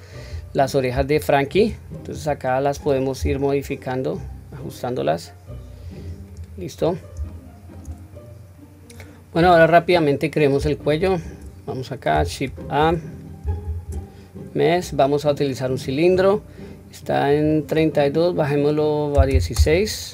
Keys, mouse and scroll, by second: 0.2-0.9 scroll down 1, 1.0-1.5 shift+middle drag, 2.1 click, 3.1 g, 6.3 click, 6.7 scroll down 1, 7.2-7.7 shift+middle drag, 9.4-9.9 scroll down 1, 9.9-10.3 scroll up 1, 10.4 scroll down 1, 12.4-12.9 scroll up 1, 13.1 click, 13.6 shift+a, 17.3-19.6 drag.